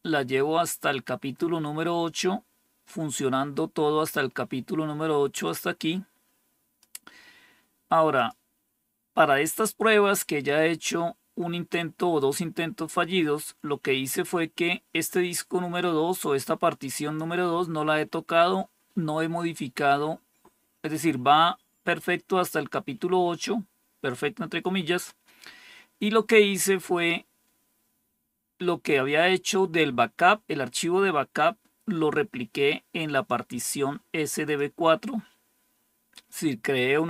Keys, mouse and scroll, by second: 0.2-1.3 scroll down 5, 1.7-2.4 scroll down 4, 2.7-4.1 scroll down 3, 5.3-6.7 drag, 8.0 click, 15.2-17.1 drag, 33.1-34.5 drag.